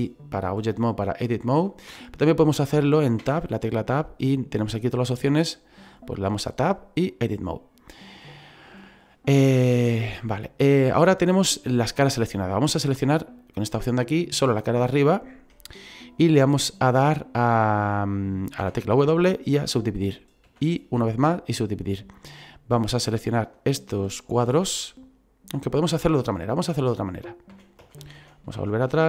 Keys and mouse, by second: 0.4 click, 3.2 Tab, 7.0 click, 13.8 click, 15.1 right click, 18.6 w, 19.4 click, 20.5 w, 21.2 click, 22.9 right click, 23.5 shift+right click, 27.5 ctrl+z.